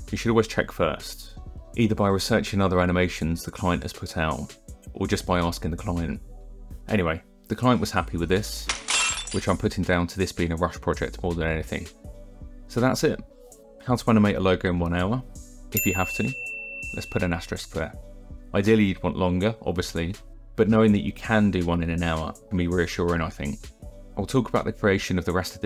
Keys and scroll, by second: 10.8-13.0 typing, 11.4 shift+Down.